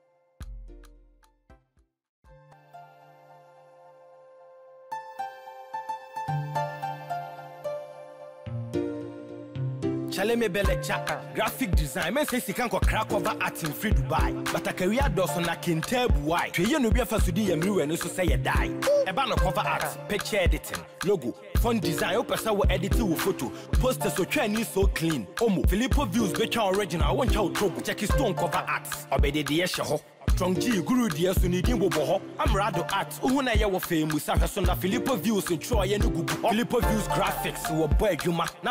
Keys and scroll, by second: 7.8 ctrl+Return, 14.1 ctrl+z.